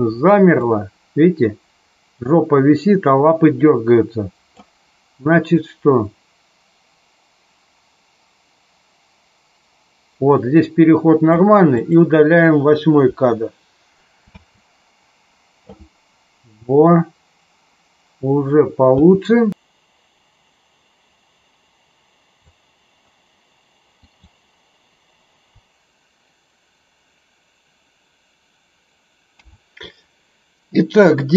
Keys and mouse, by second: 0.6-4.5 drag, 5.5-11.4 drag, 11.8 click, 13.1 Delete, 14.2 space, 19.0 space, 19.5-22.5 drag, 23.9 click, 29.2 a.